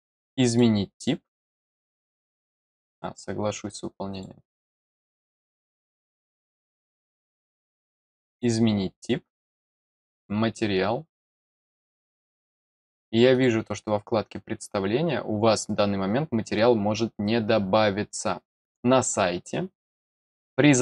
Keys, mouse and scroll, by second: 0.4 click, 4.1 click, 6.7 click, 7.4 click, 8.2 click, 10.1 click, 11.3 click, 13.3 click.